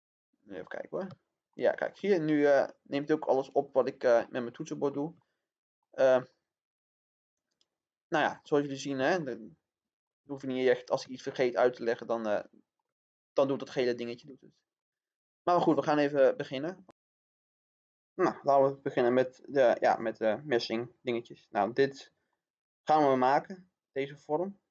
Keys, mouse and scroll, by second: 1.4 shift+middle click, 3.6 click, 5.1 shift+middle click, 6.2-8.3 shift+middle drag, 8.5-8.9 scroll up 1, 9.1-12.7 shift+middle drag, 13.0 scroll down 1, 13.4 shift+middle click, 14.7 middle click.